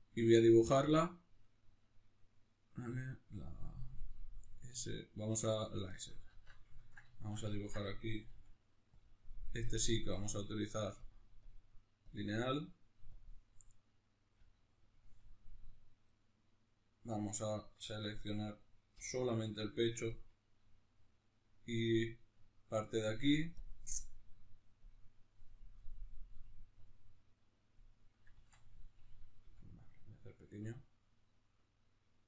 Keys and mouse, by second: 5.7-8.7 shift+middle drag, 6.2 alt+q, 8.1 f, 8.7 click, 14.1 click, 14.1 f, 15.8-17.7 right drag, 17.7 Tab, 18.7 l, 19.9 Tab, 24.7-29.9 drag, 28.1 ctrl+z, 29.1 f.